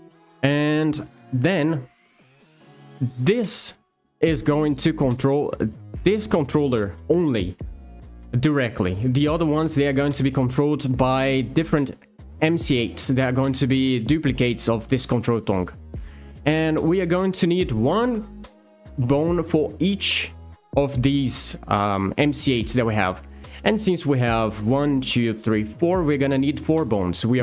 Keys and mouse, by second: 10.6 shift+middle click, 15.4 shift+middle click, 16.8 shift+middle click, 20.9 click, 21.9 click, 22.2 click, 26.9 click.